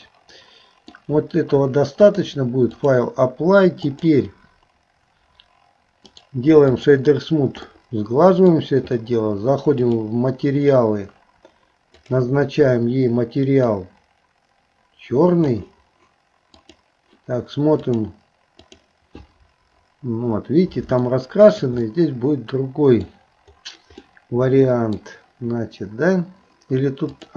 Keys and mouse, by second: 2.2 click, 3.9 click, 6.1 right click, 7.7 middle click, 10.1-12.2 drag, 16.7 click, 18.0 click, 18.7 click, 21.1 shift+middle click, 21.8-23.1 middle drag, 24.0 middle click.